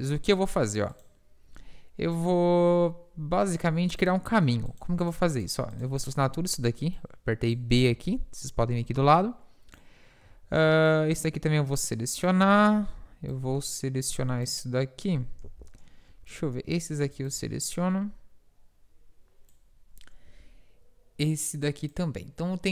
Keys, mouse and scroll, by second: 2.0 middle click, 2.1 KP_7, 6.5 b, 6.6-7.8 right drag, 8.9 b, 13.0 b, 13.4 b, 15.5 ctrl+z, 16.2 b, 17.1 b, 20.3 b.